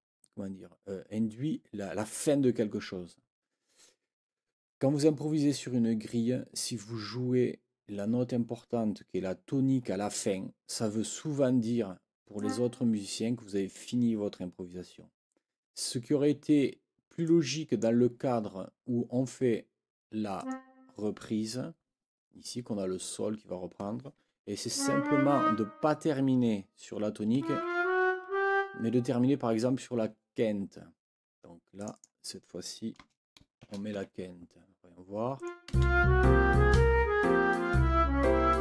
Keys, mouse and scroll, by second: 10.2 click, 12.3 click, 17.2 click, 20.4 click, 24.7 Up, 27.3 Up, 31.8 click, 33.0 BackSpace, 33.9 shift+Escape, 35.3 click, 35.7 space.